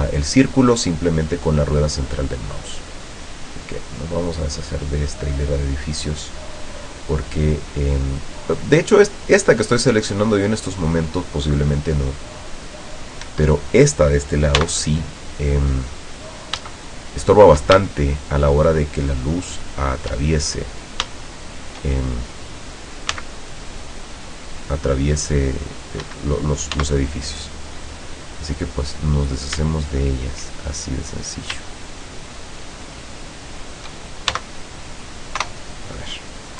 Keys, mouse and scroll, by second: 2.2-13.1 drag, 13.3 Escape, 14.7 x, 15.3 click, 16.8 shift+middle click, 18.0 shift+middle click, 18.9 shift+middle click, 20.9 scroll down 2, 21.3 shift+middle click, 23.2 c, 23.8-26.1 drag, 26.1 Escape, 26.9 x, 27.3 click, 27.8 middle click, 28.4 middle click, 28.7 scroll up 1, 29.3 right click, 29.9 shift+right click, 31.1 click, 31.8 shift+right click, 32.4 shift+right click, 32.8 shift+right click, 33.3 shift+right click, 33.7 shift+right click, 34.4 shift+x, 34.6 click, 35.5 KP_0.